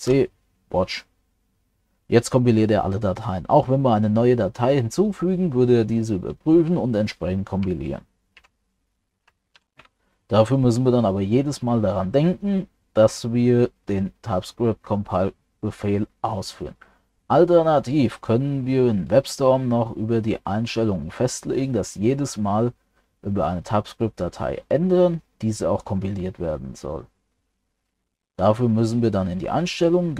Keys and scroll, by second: 8.4 ctrl+c.